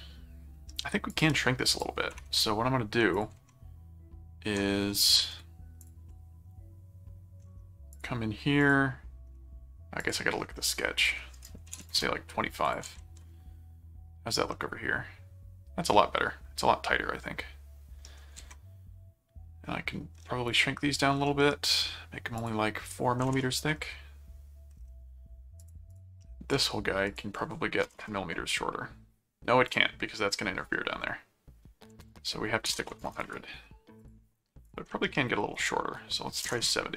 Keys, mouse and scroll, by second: 1.1 click, 1.7 click, 3.1 ctrl+click, 3.4 ctrl+Tab, 5.8 click, 6.1 middle click, 7.9 click, 8.6 click, 10.0 click, 11.0 click, 12.6 ctrl+click, 12.9 ctrl+Tab, 14.5-18.2 middle drag, 18.3 ctrl+Tab, 20.4 click, 21.2 middle click, 22.4 click, 25.6 click, 26.2 middle click, 27.1 click, 29.7 click, 32.7 BackSpace, 34.0 click, 34.6 click, 34.9 middle click, 35.5 click.